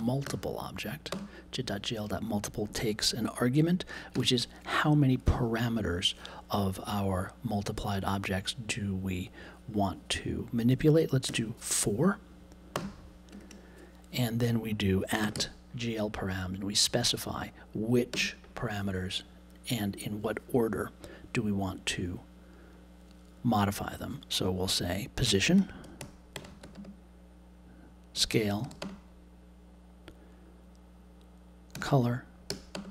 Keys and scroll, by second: 1.1 space, 11.2 4, 12.7 space, 13.3 shift+2, 15.0-15.8 typing, 18.1 space, 25.2-26.7 typing, 28.1 s, 28.7 e, 28.8 space, 31.7-32.9 typing.